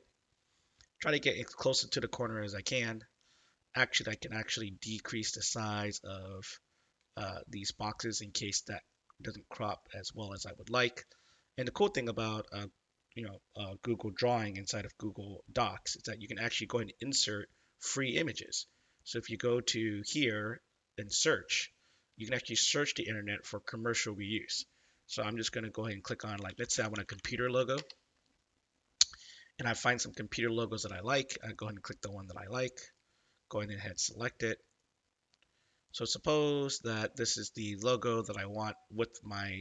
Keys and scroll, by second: 26.1-27.6 typing, 27.7 Return.